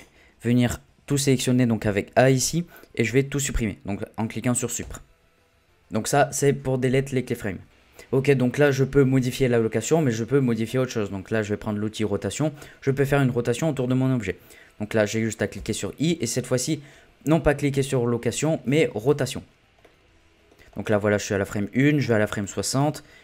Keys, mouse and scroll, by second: 1.1 a, 4.8 Delete, 10.6-13.6 drag, 15.6 i, 19.8 middle click, 20.6-21.1 scroll up 2, 21.1-22.4 middle drag, 22.4-23.2 drag.